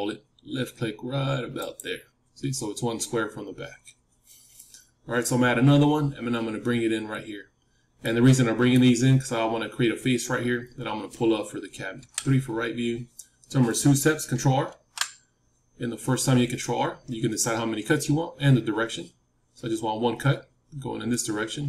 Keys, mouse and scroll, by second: 7.5-8.1 scroll up 1, 8.1-10.5 middle drag, 11.9 KP_3, 12.6-15.0 middle drag, 14.6 ctrl+r.